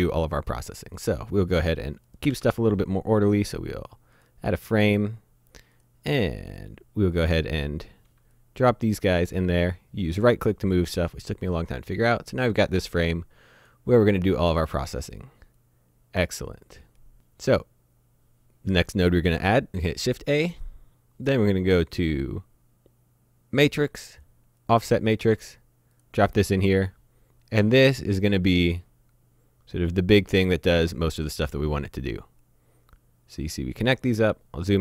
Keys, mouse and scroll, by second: 0.5-1.0 scroll down 1, 1.0 middle click, 2.1 click, 2.3 shift+a, 4.2 click, 9.6 right click, 12.0 click, 15.6 click, 19.0 click, 19.3 shift+a, 24.6 click, 28.6 click, 34.1-34.8 scroll up 1.